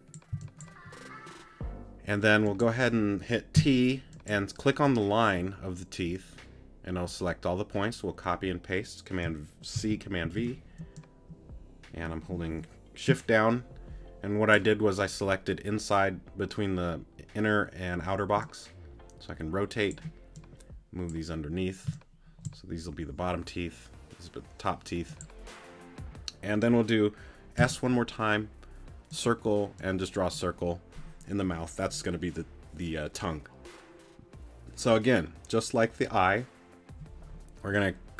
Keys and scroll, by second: 0.3 c, 3.5 t, 21.9 space, 27.6 s.